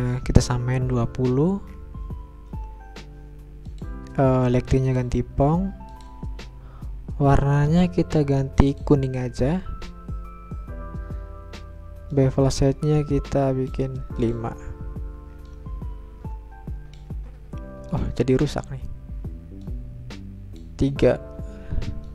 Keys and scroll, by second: 0.0-0.7 typing.